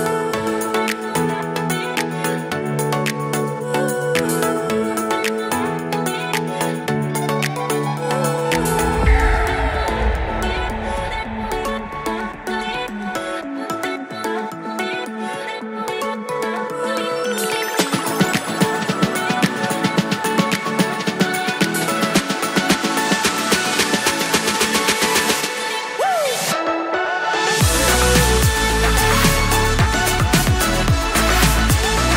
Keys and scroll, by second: 1.2 super+s, 4.9 super+s, 18.8 super+s, 24.1 shift+super+Left, 24.3 super+c, 24.5 super+v, 24.7 super+Left, 26.1 super+Right, 26.3 super+s.